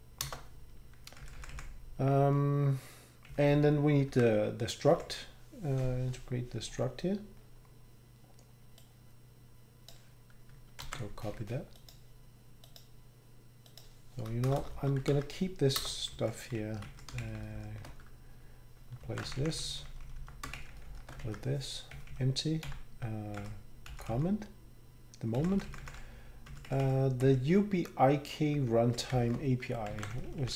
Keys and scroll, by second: 0.2 Up, 0.2 Return, 1.4 Down, 1.5 Down, 4.1 Up, 4.1 ctrl+Tab, 4.9 Down, 10.8 ctrl+c, 14.5 Return, 14.6 Return, 14.7 Return, 15.1 ctrl+v, 15.8 Return, 16.1 Down, 16.8 Right, 17.2 shift+Down, 17.4 shift+Down, 17.5 shift+Down, 19.0 ctrl+x, 19.5 Up, 19.9 Up, 20.5 shift+Down, 20.7 shift+Down, 21.2 shift+Down, 21.2 ctrl+v, 22.6 End, 23.4 Down, 23.9 Down, 24.1 Down, 25.4 Down, 25.5 Down, 25.7 Down, 25.8 Down, 26.5 Right, 26.7 Right, 26.8 Right, 27.2 Right, 28.8 ctrl+shift+Right, 29.1 shift+Left, 29.9 ctrl+c, 30.4 Up.